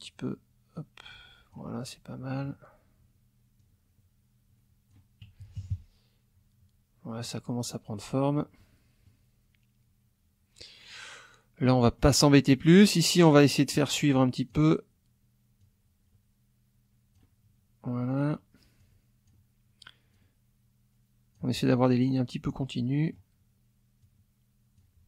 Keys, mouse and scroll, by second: 0.7-1.7 drag, 1.8 middle click, 3.6-5.1 drag, 5.4 KP_Subtract, 7.2 middle click, 8.6 middle click, 11.6 middle click, 12.8-14.7 drag, 15.6-17.3 drag, 18.8 click, 20.1-21.5 drag, 22.6 middle click, 24.0-25.0 drag.